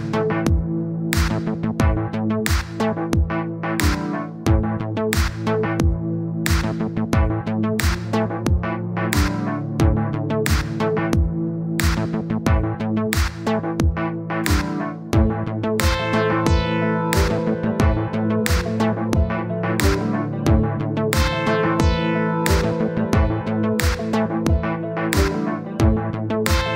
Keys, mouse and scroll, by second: 1.0 click, 1.3-2.7 middle drag, 2.7 click, 3.1 scroll down 1, 3.5-4.5 drag, 5.3-6.3 drag, 6.8 n, 7.1 scroll up 1, 7.3 scroll down 2, 7.5 middle click, 8.3 scroll up 1, 8.6 middle click, 9.3 click, 11.9-13.2 middle drag, 13.2 scroll up 1, 14.6-15.2 scroll down 10, 17.2 click, 17.5-18.4 scroll down 11, 18.4-19.7 drag, 20.6-22.4 middle drag, 22.4-22.7 scroll down 1, 22.7 middle click, 23.0-24.0 scroll up 2, 24.0-25.3 middle drag, 25.9-26.7 drag.